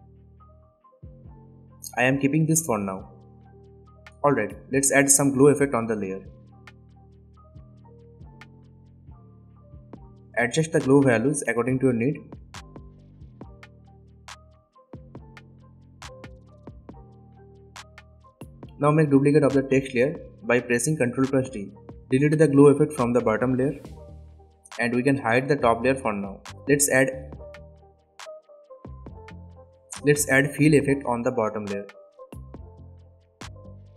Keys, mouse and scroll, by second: 6.6 click, 8.3-9.4 typing, 10.0-12.9 drag, 21.6 ctrl+d, 22.4 click, 24.6 Delete, 25.6 click, 28.3 click, 30.2-31.8 typing, 32.6-33.9 drag.